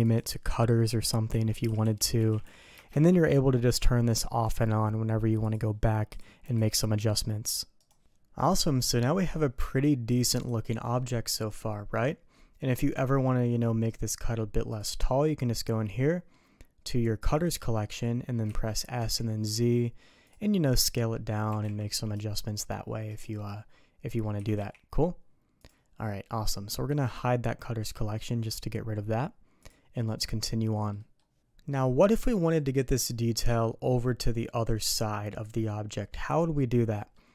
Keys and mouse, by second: 0.0-3.6 drag, 1.8 t, 4.4 click, 5.4 click, 6.1 click, 6.4 g, 8.3 middle click, 10.4 click, 10.9-12.9 middle drag, 14.7 click, 17.2 click, 17.4 click, 18.4 s, 20.5 click, 21.6 g, 23.5 click, 24.3 s, 29.6 click, 30.0-30.9 middle drag, 30.9 middle click, 31.7-32.2 middle drag, 32.6 middle click, 34.1 middle click, 36.3-37.1 middle drag.